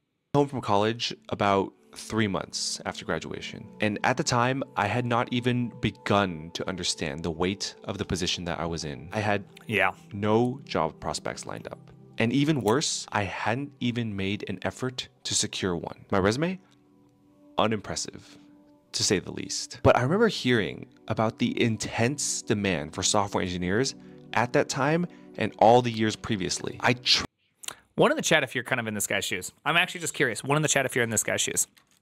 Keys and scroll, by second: 28.3 alt+[.